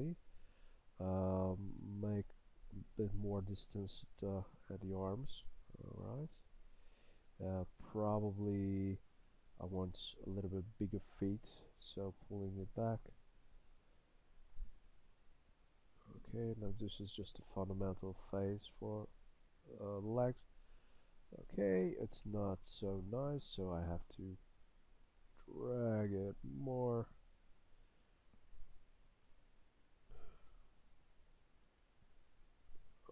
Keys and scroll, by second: 1.7 s, 9.8 s, 18.5 s, 19.1 s, 24.1 s, 30.4 s.